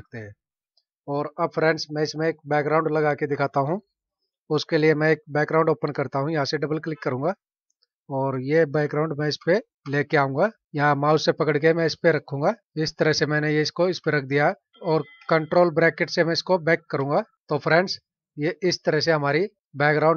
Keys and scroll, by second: 1.2 ctrl+-, 16.9 ctrl+[, 18.0 ctrl+-.